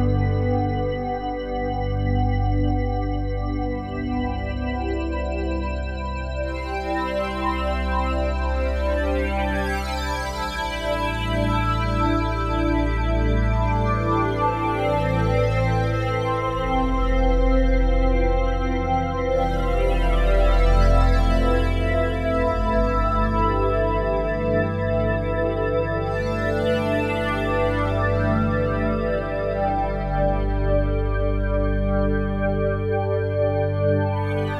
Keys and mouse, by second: 1.6 click, 3.4 click, 4.4-6.0 drag, 7.4 click, 7.9 click, 8.7 click, 9.3 click, 10.9 click, 12.0-13.6 drag, 14.7 click, 16.3 click, 16.8 click, 17.5 click, 18.4 click, 23.0 click, 24.2 click, 25.4 click, 26.9-27.9 drag, 29.3-32.2 drag.